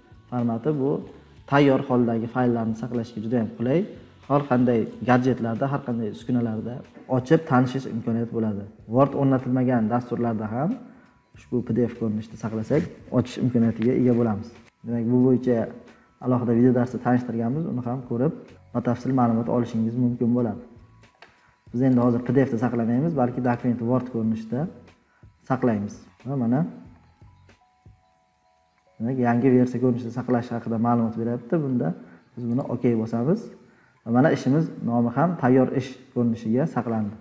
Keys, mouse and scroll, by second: 24.0 click, 26.7 click, 32.8-35.4 drag.